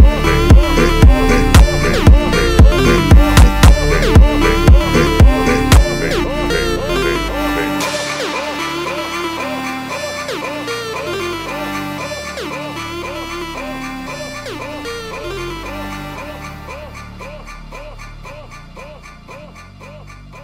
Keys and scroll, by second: 0.2 7, 0.5 Return, 0.8 2, 1.5 8, 1.8 Return, 3.3 Return, 3.5 3, 4.3 Return, 4.5 3, 4.9 1.